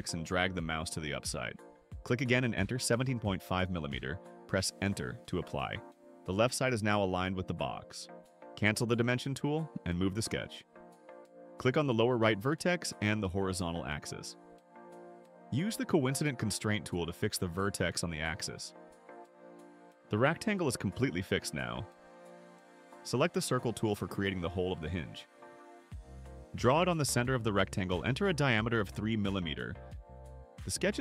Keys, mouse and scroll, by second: 0.6 click, 2.1 click, 3.2-5.1 typing, 9.0 right click, 10.5-11.2 drag, 11.4 click, 12.5 click, 13.5 click, 18.6 click, 25.5 click, 26.2 middle click, 26.2-26.5 scroll up 2, 26.4 middle click, 27.2 click, 28.8 3, 29.5 Return.